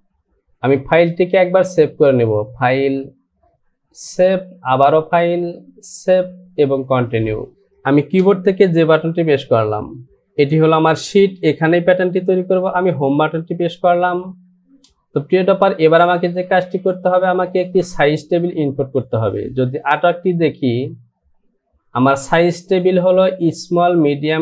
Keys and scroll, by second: 9.5 j, 13.4 Home.